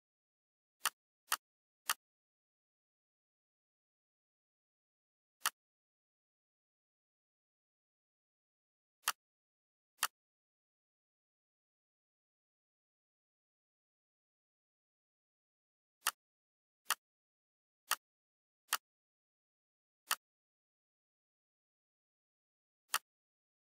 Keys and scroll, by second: 6.7 ctrl+a, 12.9 ctrl+g.